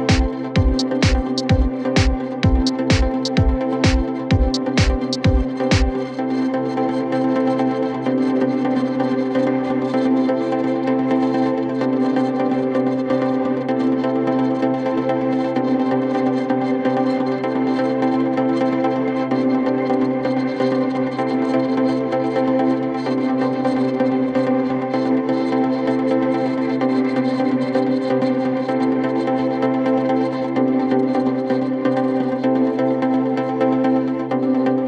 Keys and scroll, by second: 7.7 shift+Page_Down, 8.0 ctrl+Page_Up, 10.7 f, 11.4 d, 13.6 ctrl+Page_Up, 14.6 shift+Page_Up, 15.1 ctrl+Page_Down, 16.6 f, 19.8 d, 22.9 ctrl+z, 26.4 shift+Page_Up, 29.9 shift+Page_Up, 30.7 f.